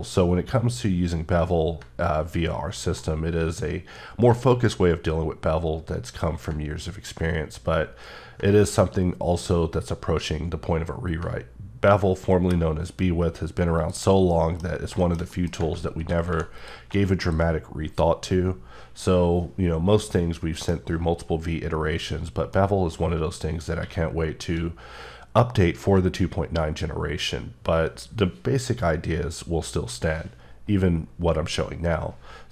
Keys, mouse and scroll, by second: 1.8-2.4 ctrl+scroll up 1, 3.1 ctrl+scroll, 3.1-3.5 scroll down 1, 5.0 scroll up 1, 6.5-7.1 ctrl+scroll up 2, 8.6-9.0 ctrl+scroll up 1, 13.8 click, 14.3 middle click, 14.6 scroll down 2, 15.0 shift+middle click, 16.2 2, 16.5 click, 19.5 scroll up 1, 20.1 middle click, 22.5 middle click, 23.8 q.